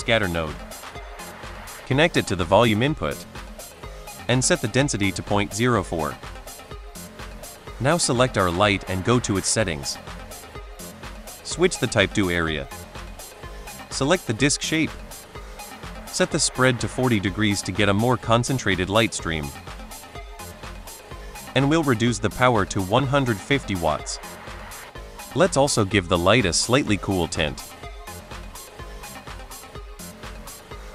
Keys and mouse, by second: 1.5 click, 2.0-2.5 drag, 3.3 middle drag, 4.2-5.8 drag, 7.6 click, 9.5 click, 11.5 click, 13.6-14.5 drag, 15.8-17.4 drag, 21.6-23.5 drag, 24.8 click.